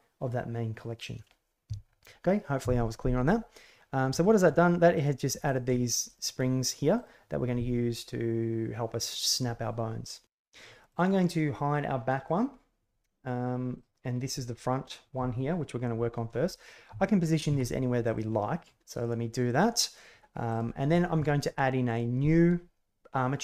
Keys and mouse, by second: 4.2 shift+middle click, 4.4 middle click, 4.9 right click, 5.4 shift+right click, 6.0 right click, 6.3 middle click, 6.9 right click, 12.2 click, 13.7 right click, 17.0-17.3 shift+drag, 18.0 g, 19.0 click, 20.4 right click, 21.8 right click.